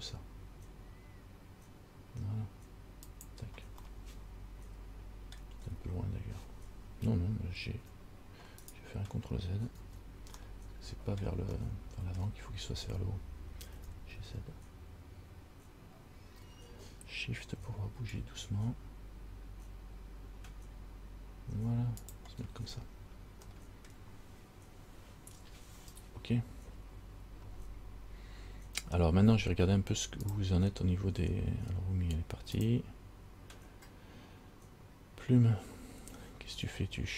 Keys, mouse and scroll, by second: 4.1 middle click, 5.8-7.1 scroll up 1, 7.1 scroll up 1, 8.0 g, 10.0 ctrl+z, 10.6 middle click, 11.8 shift+middle click, 13.2-13.8 scroll down 1, 13.9 g, 22.8-23.6 scroll down 4, 23.7 middle click.